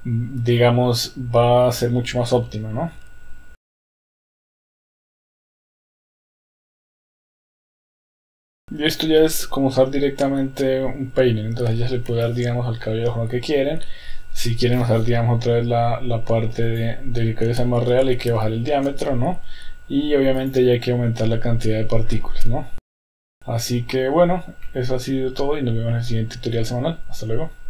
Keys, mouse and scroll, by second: 3.8 Tab, 3.9 Tab, 4.0 click, 4.3 shift+middle click, 4.4 shift+middle click, 4.5 click, 4.7 click, 5.5 click, 5.7 click, 5.9-6.3 drag, 6.3 click, 6.5 click, 6.8 middle click, 7.0 KP_1, 7.1 click, 7.3 click, 7.5 click, 7.8 drag, 8.0 click, 8.2 click, 8.3 KP_1, 8.3 shift+middle drag, 8.5 middle click, 9.4-11.6 middle drag, 12.3 KP_1, 16.8-19.4 drag, 20.7 click, 22.9 click, 23.1 shift+middle click, 23.3-24.3 middle drag, 24.9-25.7 middle drag.